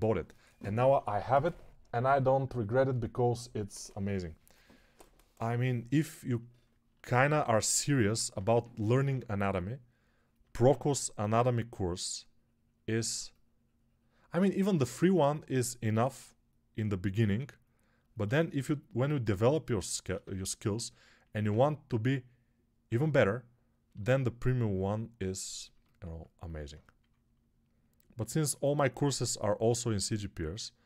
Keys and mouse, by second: 8.2 3, 8.7 [, 8.8 [, 9.0 [, 10.5 alt+q, 17.1 x, 23.8 g, 28.0 x.